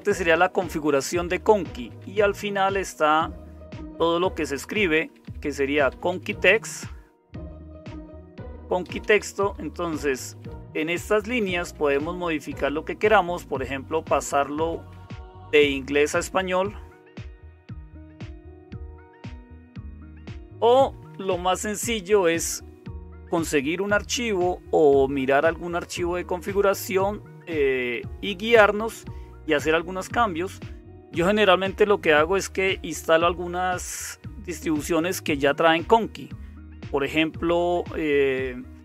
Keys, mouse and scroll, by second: 0.0-38.8 typing, 6.1 Up, 6.3 Up, 6.5 Up, 7.4 Up, 7.6 Down, 7.8 Down, 16.3 Down, 16.3 Up, 16.5 Down, 16.6 Down, 16.9 Down, 17.0 Down, 17.2 Down, 18.0 Down, 19.1 Down, 19.7 Up, 19.8 Up, 19.9 Up, 20.1 Up.